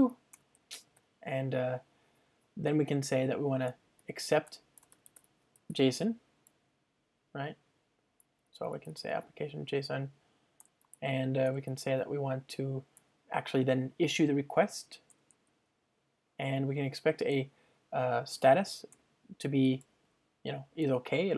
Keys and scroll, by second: 4.9 Return, 10.8 Return, 19.6 Return.